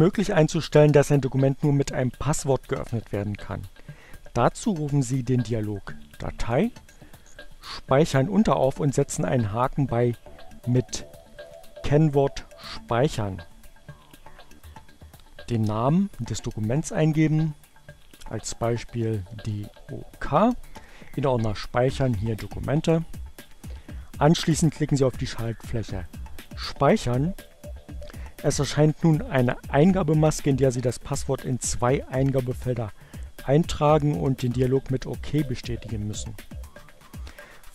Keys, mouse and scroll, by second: 6.4 click, 7.1 click, 11.1 click, 15.5-17.0 drag, 18.0-18.9 typing, 25.9 click.